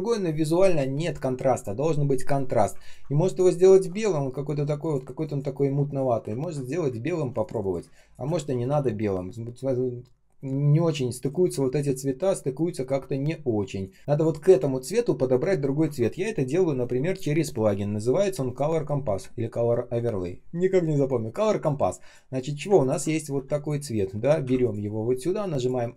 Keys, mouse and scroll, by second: 2.7 ctrl+click, 6.3 ctrl+scroll down 1, 6.8 space, 7.7 space, 8.4 ctrl+я, 9.1 ctrl+scroll up 1, 10.5 ctrl+scroll down 1, 10.9 space, 12.2 ctrl+scroll up 1, 13.1 ctrl+scroll down 1, 13.7 ctrl+click, 14.0 ctrl+я, 14.1 ctrl+click, 18.2 ctrl+., 18.9 Return, 18.9 Return, 22.7 ctrl+click.